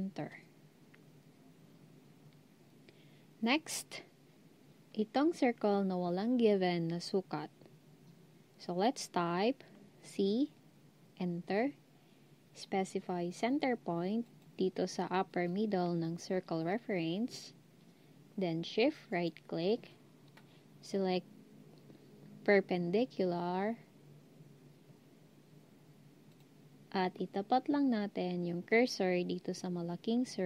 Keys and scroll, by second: 10.1 c.